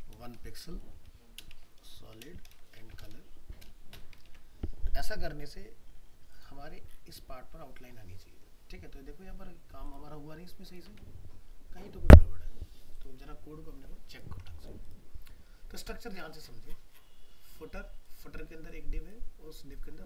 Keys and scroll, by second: 4.3 ctrl+s, 10.9 alt+Tab.